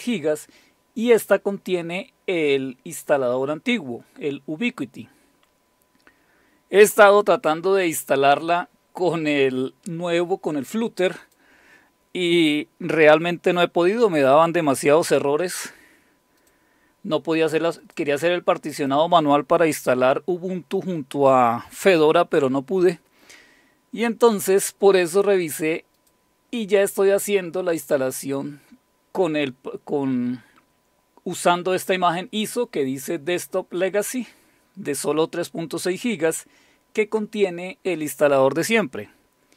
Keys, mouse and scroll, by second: 11.2 click, 16.4 click, 17.8 click, 18.8 click, 25.9 click, 26.4 click.